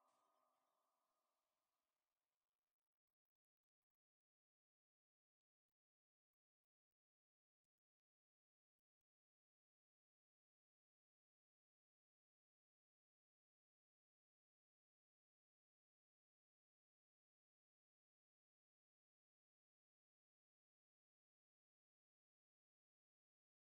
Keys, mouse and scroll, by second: 1.3 click, 2.6 a, 3.5 s, 16.8 ctrl+z, 17.3 ctrl+z, 18.2 ctrl+z, 19.0 ctrl+z, 19.5 ctrl+z, 23.1 click.